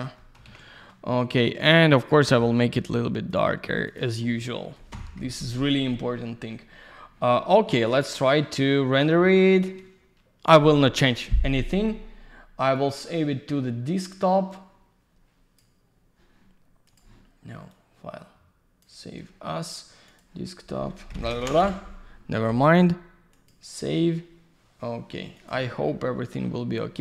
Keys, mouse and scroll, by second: 0.2 middle click, 0.5 ctrl+a, 1.9 click, 2.0 click, 2.9 click, 3.9 click, 4.0 click, 4.5 alt+middle click, 4.9 F4, 7.4 middle click, 7.5 middle click, 7.8 alt+w, 8.9 middle click, 9.0 middle click, 10.4 typing, 10.4 click, 10.5 click, 12.7 click, 16.8 click, 17.0 click, 17.7 click, 20.1 click, 20.2 click, 20.9-21.9 typing, 23.3 click, 25.4 click, 25.5 click.